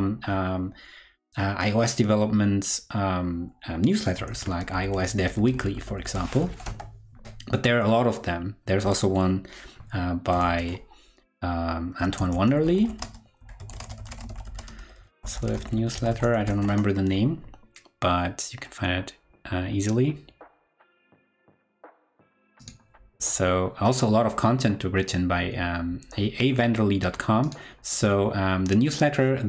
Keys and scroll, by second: 4.2 super+t, 10.4 super+t.